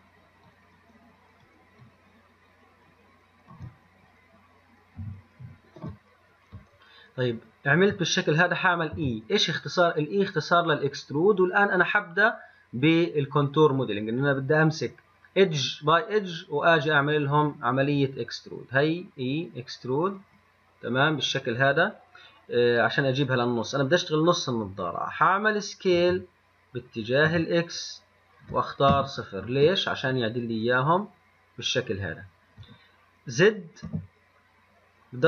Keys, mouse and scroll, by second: 5.2 n, 9.2 e, 26.2 s, 34.1 z.